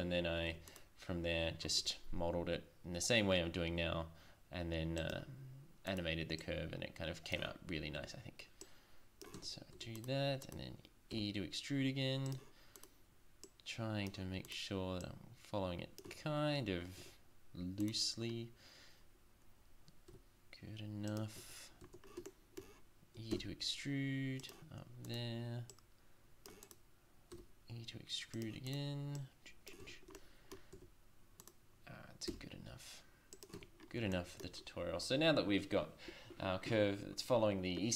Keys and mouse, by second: 0.5 Tab, 1.8 e, 7.4 Tab, 8.0 Tab, 9.4 Tab, 9.7 Tab, 11.1 e, 16.1 Tab, 17.0 Tab, 20.1 e, 21.4 Tab, 21.8 Tab, 23.3 e, 25.1 click, 27.3 e, 29.8 Tab, 30.2 middle drag, 30.8 Tab, 31.4 right click, 32.3 e, 33.6 Tab.